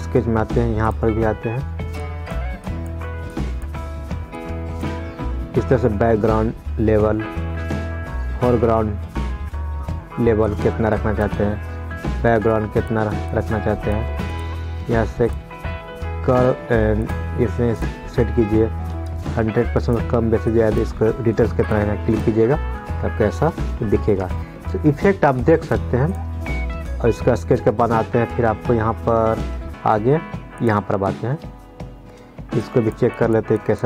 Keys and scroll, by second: 24.5 ctrl+z.